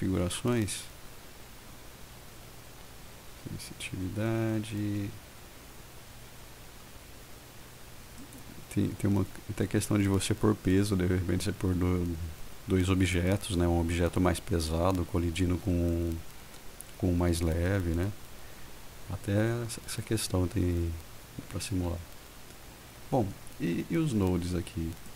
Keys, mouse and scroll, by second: 8.3 click.